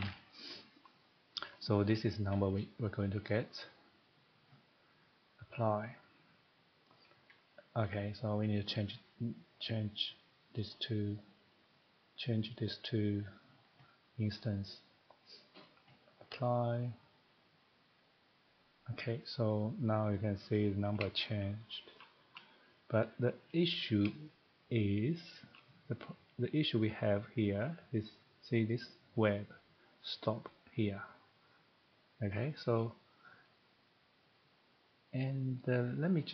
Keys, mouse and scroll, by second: 0.0 typing, 1.1 click, 5.6 click, 8.6 click, 10.5 click, 13.3 click, 14.7 click, 15.4 click, 16.4 click, 20.2 click, 21.0 scroll, 22.0 shift+middle click, 22.5 scroll, 23.2 middle click, 25.3 shift+middle click, 32.4 middle click, 32.4 middle click, 33.3 middle click, 33.3 scroll, 34.3 click.